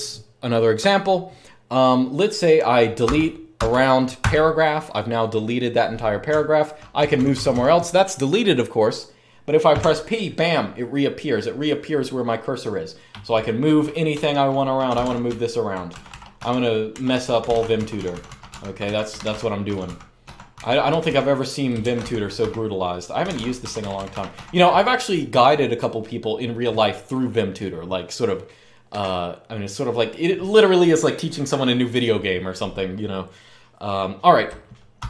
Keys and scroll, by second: 2.8-3.9 typing, 6.0-6.7 typing, 9.5 p, 13.9-23.9 typing, 34.5-35.0 typing.